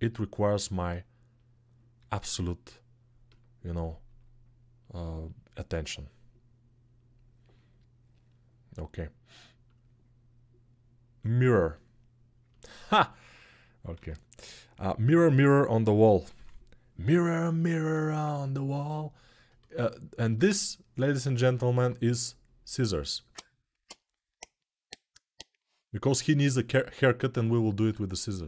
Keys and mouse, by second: 0.2 middle click, 0.6-2.5 drag, 1.7 g, 2.5-3.5 middle drag, 3.5-4.6 drag, 4.6 middle click, 5.0-7.0 drag, 7.0-9.5 middle drag, 9.5-28.4 drag, 13.7 x, 16.1 Home.